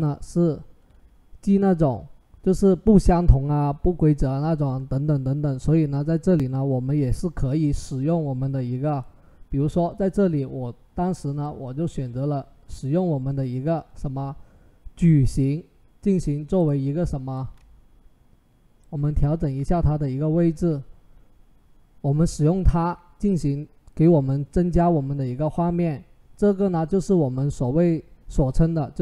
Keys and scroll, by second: 18.9 Right, 19.1 Right, 19.4 Down.